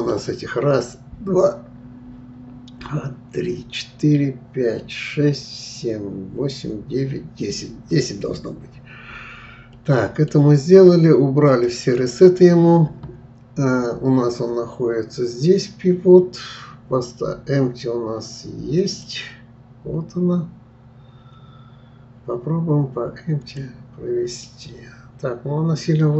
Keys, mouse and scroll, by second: 9.7-11.5 middle drag, 11.5-11.8 drag, 18.8 click, 23.4 click, 24.4-26.1 middle drag.